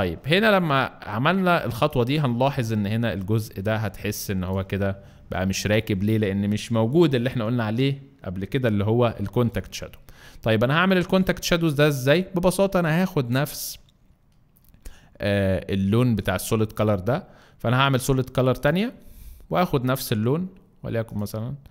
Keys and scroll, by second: 1.7 alt+space, 2.3 alt+space, 4.0 alt+space, 11.2 alt+space.